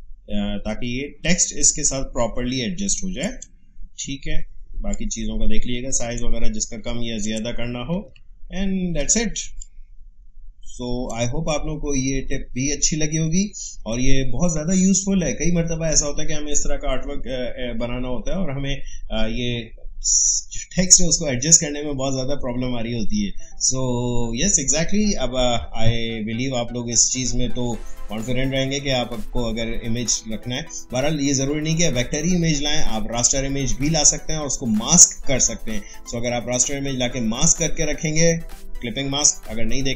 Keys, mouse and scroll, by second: 3.2 click, 4.9-8.0 shift+drag, 8.2-9.0 alt+scroll down 1, 9.4 space, 9.6 click, 9.9 space.